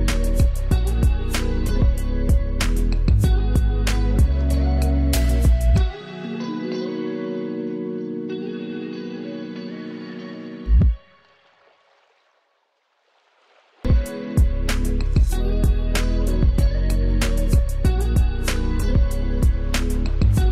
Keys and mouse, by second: 0.0-6.1 typing, 7.5-19.0 drag, 19.6 Return, 20.0-20.5 drag.